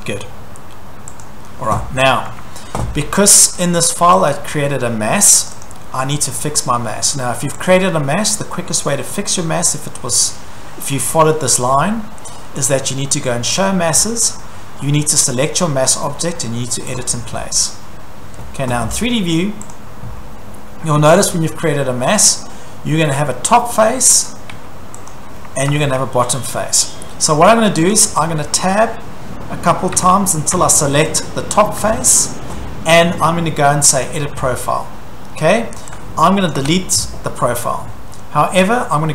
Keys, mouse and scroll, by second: 0.1 Escape, 1.2 click, 1.6 Escape, 2.3 scroll, 2.3 Escape, 4.3 click, 4.6 middle click, 5.5 click, 5.6 click, 7.7 click, 11.6 click, 12.7 click, 13.6 click, 15.3 click, 16.9 click, 19.7 click, 21.3-21.7 scroll down 4, 22.3 shift+middle click, 23.7 Tab, 23.7 shift+middle click, 24.1 Tab, 24.6 Tab, 25.1 click, 25.7 Escape, 25.8-26.4 scroll, 27.9 click, 29.4 Tab, 29.9 Tab, 30.6 Tab, 31.2 click, 34.0 click, 36.6 click, 36.6 Delete.